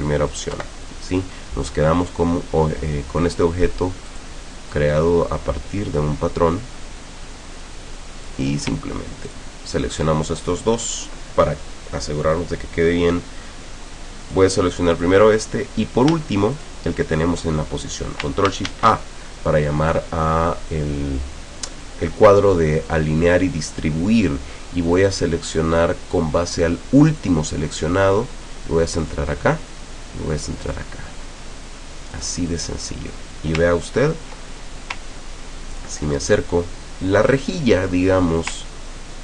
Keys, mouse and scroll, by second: 0.0 click, 0.6 Delete, 1.1 click, 2.1 click, 4.2 click, 4.8-8.5 drag, 9.3 shift+click, 11.0 click, 14.3 click, 15.0 click, 16.6 shift+click, 18.7 ctrl+shift+a, 25.1 click, 27.2 click, 29.0 click, 30.7 click, 32.2 click, 32.6 click, 33.8-34.1 ctrl+scroll up 2, 35.2-35.5 ctrl+scroll up 2, 38.9-39.2 ctrl+scroll down 4.